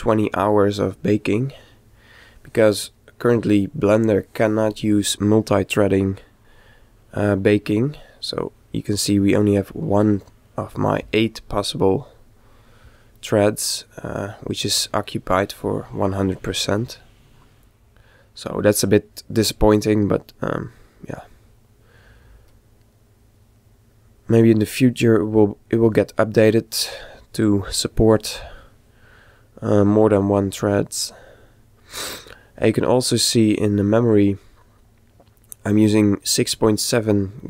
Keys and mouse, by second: 1.0-2.8 middle drag.